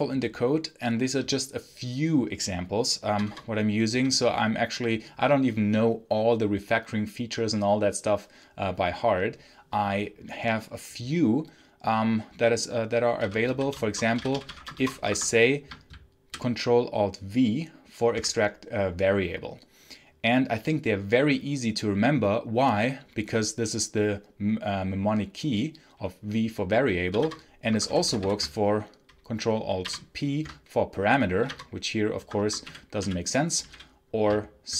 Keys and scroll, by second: 3.0 Return, 3.8 k, 12.8-15.3 typing, 15.8 ctrl+alt+v, 27.0 i, 27.1 Return, 27.6 Escape, 27.7 h, 29.7 ctrl+alt+p, 31.2 i, 31.3 Return, 32.0 Escape, 32.3 Escape, 32.5-34.0 typing, 34.6 ctrl+alt+c.